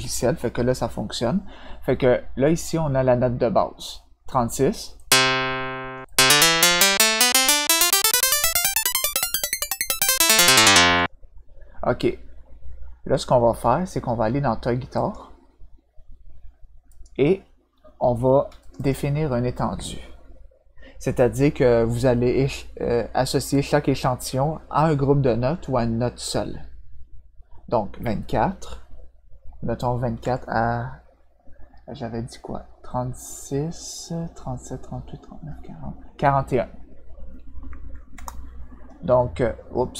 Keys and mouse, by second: 4.9 click, 6.0-10.9 drag, 14.9 click, 16.8 click, 18.6 click, 18.7 click, 30.2 -, 38.1 Return.